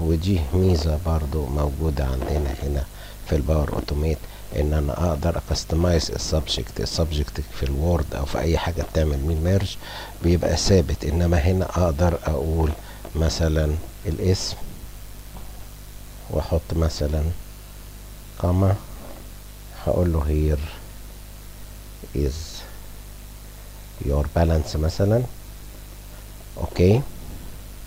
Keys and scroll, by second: 19.8 r, 22.4 i, 23.2 s, 24.4 y, 25.4 o, 25.9 u.